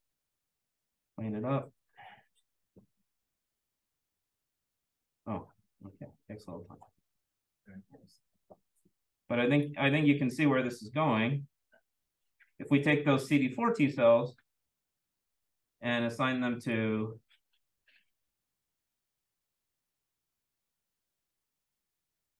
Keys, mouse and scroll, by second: 0.0 click, 1.0 click, 3.0 click, 6.1 click, 10.2 click, 13.6 click, 15.2 click, 16.6 click, 18.2 click.